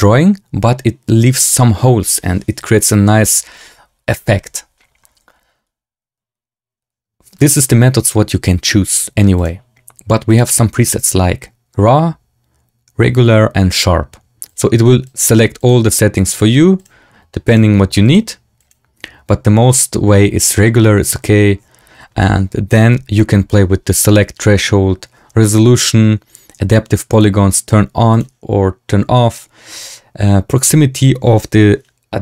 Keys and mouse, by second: 7.3-9.3 drag, 10.2-14.5 drag, 15.0-15.6 drag, 16.1-16.8 drag, 17.5-18.0 drag, 18.5-19.7 drag, 27.0 click, 28.0 click.